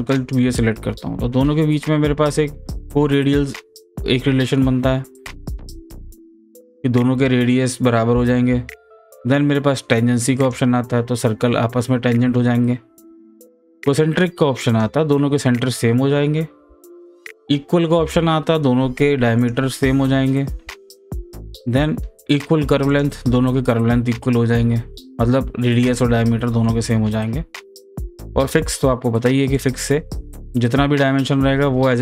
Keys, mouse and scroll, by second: 6.2 click, 8.5 ctrl+z, 10.4 click, 13.1 click, 13.2 ctrl+z, 14.7 click, 16.8 ctrl+z, 19.4 click, 20.8 ctrl+z, 22.9 click, 28.0 click, 28.3 ctrl+z, 29.6 click.